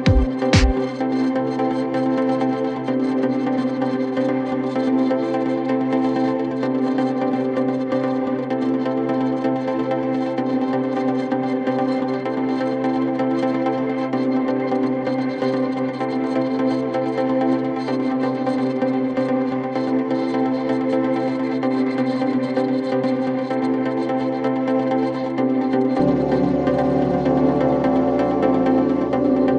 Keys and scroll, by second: 3.7 f, 11.6 5, 12.1 5, 12.9 F9.